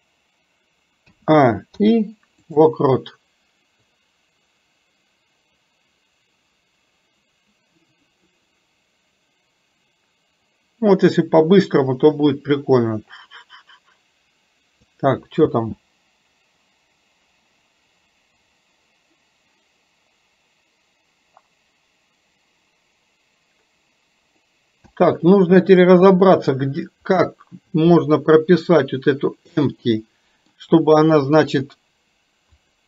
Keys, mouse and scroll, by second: 4.0-15.0 drag, 26.0-26.6 middle drag, 29.9 middle click, 31.8 click, 32.7 click.